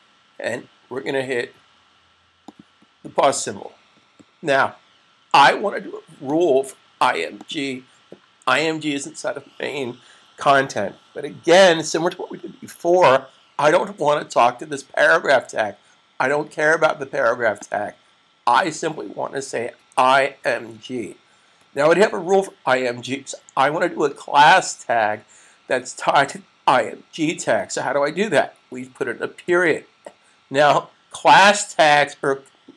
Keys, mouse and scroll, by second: 2.3 click, 6.2 click, 17.5 click, 19.5-20.7 typing, 29.4 space.